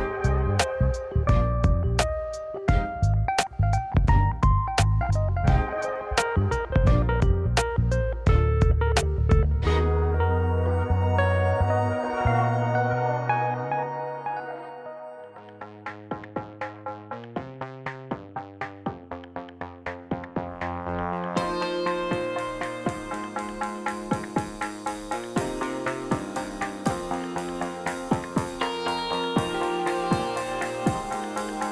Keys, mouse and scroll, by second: 1.1 ctrl+r, 2.6 click, 3.1 click, 3.9 g, 10.3 click, 11.0-13.8 middle drag, 15.1 ctrl+z, 16.2-19.8 middle drag, 20.4 click, 21.5 click, 22.3 g, 25.8-27.5 middle drag, 27.7 click, 28.9-30.5 middle drag, 30.5 `, 30.8 `.